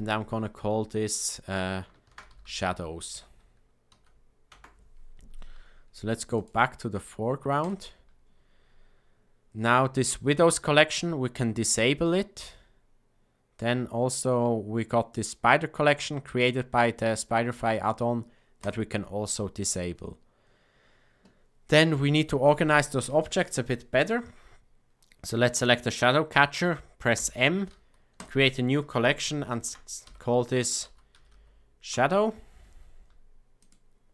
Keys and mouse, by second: 6.3-7.7 drag, 11.5 click, 15.1 click, 18.5 click, 24.0 click, 27.1 m.